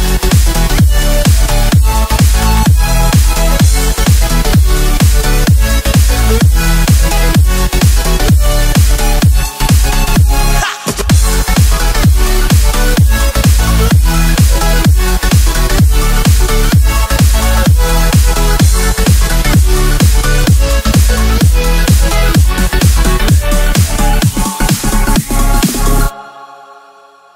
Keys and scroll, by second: 0.7-1.2 typing, 8.1 u, 9.3 a, 10.2 super+z, 10.8 a, 15.0 u, 18.4 super+z, 20.4 super+z, 25.1 a.